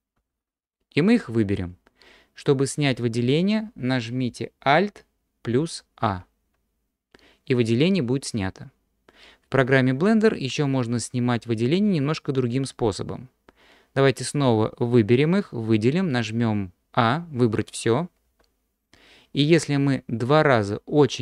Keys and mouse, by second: 0.2 a, 6.0 alt+a, 18.3 a.